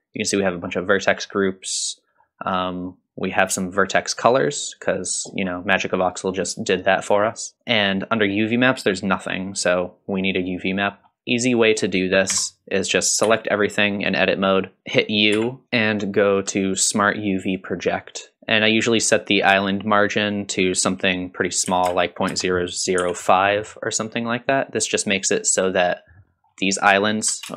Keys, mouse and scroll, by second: 0.5-1.2 scroll down 2, 1.2-3.5 scroll down 5, 3.5 click, 7.6 click, 8.2 click, 10.3 click, 10.9-11.5 scroll up 2, 11.5 click, 12.3 Tab, 13.3 a, 15.3 u, 26.3-27.3 scroll up 3.